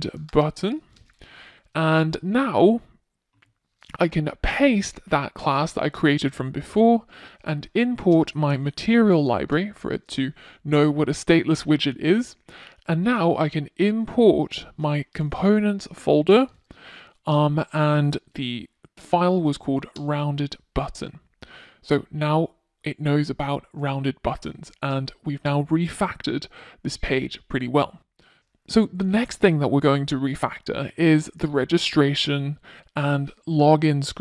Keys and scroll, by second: 2.6 super+v, 6.3 super+v, 8.0 Return, 14.4 Return.